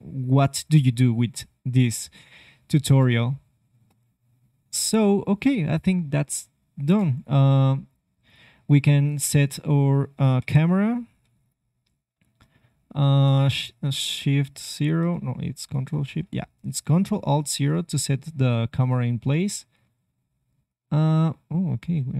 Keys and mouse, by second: 2.8 space, 3.8 space, 4.9-6.5 middle drag, 6.5 ctrl+Tab, 10.3 shift+a, 11.5 shift+a, 13.1-15.1 middle drag, 15.7 shift+KP_0, 18.7 ctrl+alt+KP_0, 18.7 g.